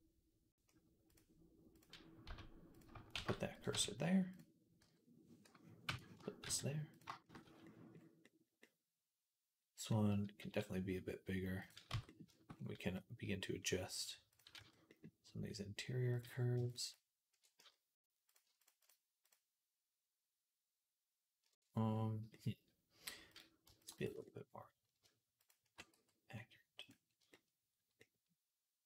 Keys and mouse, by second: 0.9 click, 1.6-4.2 middle drag, 2.1 z, 3.0 shift+s, 3.6 Tab, 4.2 click, 4.6-7.5 middle drag, 4.6 g, 6.3 shift+s, 7.3 z, 7.6-14.2 middle drag, 10.3 s, 11.8 Tab, 14.2-16.0 drag, 14.4 z, 16.0-18.4 middle drag, 18.4 click, 18.5-23.1 middle drag, 23.1 click, 23.2 middle click, 23.6 alt+shift+click, 23.7 alt+shift+middle click, 23.8 alt+shift+click, 23.9-28.8 alt+middle drag, 25.8 x.